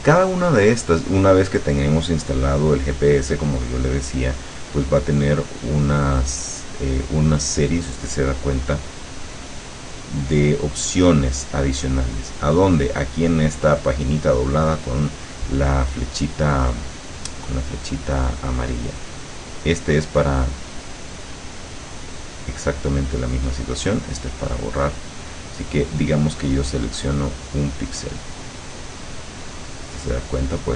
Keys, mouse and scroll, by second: 5.5 click, 12.1 click, 19.5 click, 23.1 click, 25.2 click, 27.0 click, 28.2-30.4 drag.